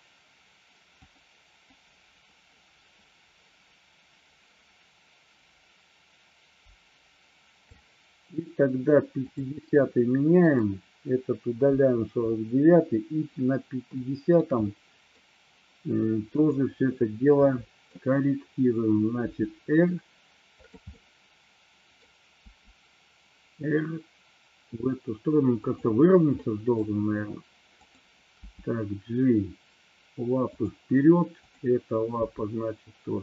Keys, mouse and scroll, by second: 1.0 click, 1.8-7.8 drag, 9.4 click, 10.5 click, 11.8 Delete, 14.2 middle click, 14.8-15.3 middle drag, 16.4-16.9 drag, 17.5-18.0 middle drag, 19.4 r, 20.7 click, 21.0-22.0 middle drag, 22.5 r, 25.7 click, 26.4 middle click, 27.9 click, 28.5 g, 30.7 click, 31.4 click, 32.3 g.